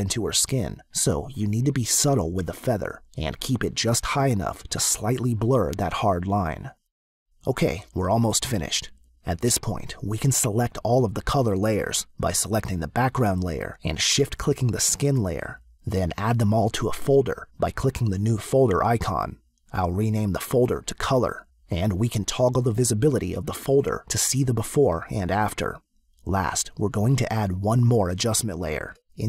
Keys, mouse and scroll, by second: 12.3 click, 14.3 shift+click, 18.8 click, 20.0 click, 20.3-21.2 typing, 24.1 click, 25.3 click, 27.2 click, 28.8 click.